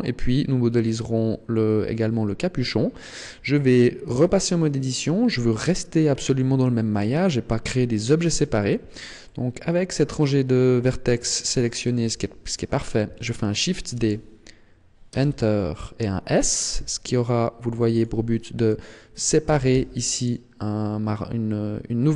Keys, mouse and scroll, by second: 2.4-4.1 scroll up 1, 4.2 Tab, 9.2 middle click, 12.1 KP_1, 13.9 shift+d, 16.7 s, 18.0 click, 18.2 middle click, 19.4 g.